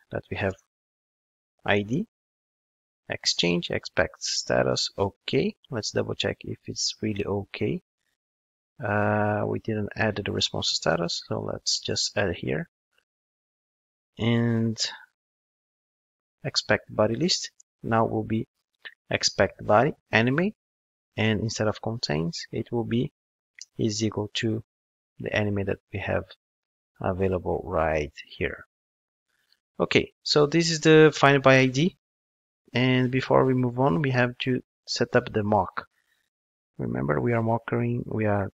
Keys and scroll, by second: 10.9 super+c, 12.0 super+v, 13.2 ctrl+Tab, 18.6 Return, 21.1 super+x, 23.6 Return.